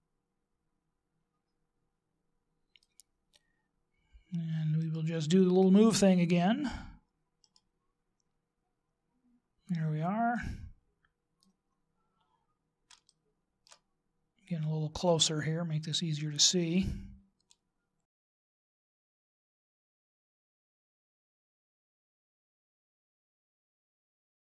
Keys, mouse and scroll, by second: 6.2 right click, 8.9 right click, 10.3 click, 11.7-13.0 scroll up 2, 13.0 shift+middle click, 13.9-14.2 scroll up 2, 14.9 scroll up 2, 16.7 click, 21.2 middle click, 21.8 shift+right click, 22.6 middle click, 23.2 click, 24.1 right click.